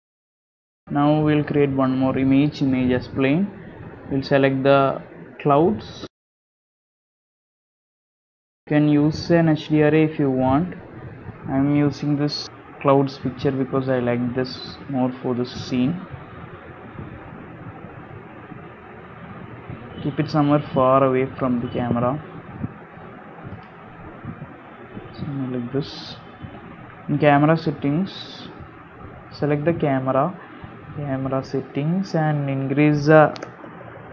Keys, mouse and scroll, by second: 0.5 middle click, 1.7 shift+a, 11.8 scroll down 1, 12.4 scroll down 5, 13.0 s, 15.5 KP_7, 16.2 g, 17.0 r, 18.0 g, 19.2 r, 21.0-25.7 typing, 24.4 scroll down 8, 24.6 shift+middle click, 27.1 click, 30.3 click, 31.2 click, 33.8 KP_0, 34.0 KP_0.